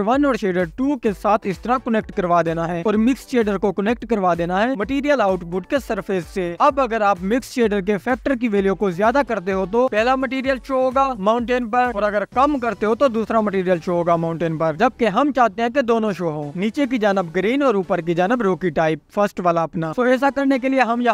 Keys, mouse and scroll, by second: 0.4-0.8 drag, 1.6 click, 4.9-6.0 drag, 7.2-12.2 drag, 12.2-13.8 scroll down 1, 13.8-15.4 scroll down 1, 15.4-20.2 drag, 20.2-21.1 scroll up 2.